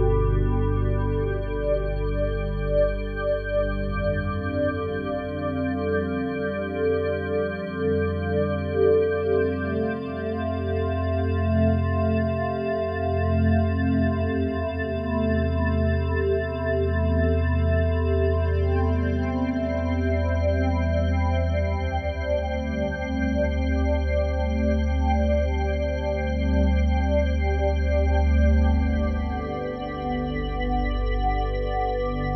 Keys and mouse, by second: 0.6 click, 1.4 click, 2.2 ctrl+alt+click, 3.1 ctrl+s, 3.6-4.3 alt+drag, 4.7 ctrl+alt+click, 5.4 ctrl+alt+click, 6.5 click, 7.1 click, 8.4 ctrl+s, 8.9-9.5 alt+drag, 9.5 ctrl+s, 9.6 click, 10.7-14.8 drag, 15.1 click, 17.7 click, 18.5 click, 19.5 click, 19.8 alt+click, 24.0-25.6 drag, 25.6 KP_5, 25.9 KP_0, 26.1 Return, 27.6 0, 28.5-29.7 ctrl+alt+drag, 29.7 F12.